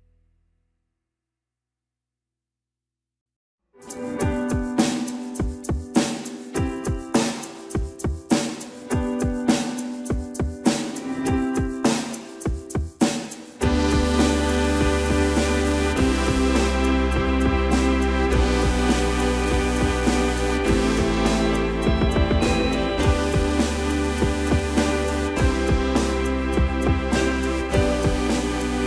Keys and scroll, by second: 4.1 alt+f, 13.7 space, 15.3 Delete, 16.1 space, 16.1 Escape, 17.8 shift+space, 18.1 Escape, 19.5 shift+space, 19.6 Escape.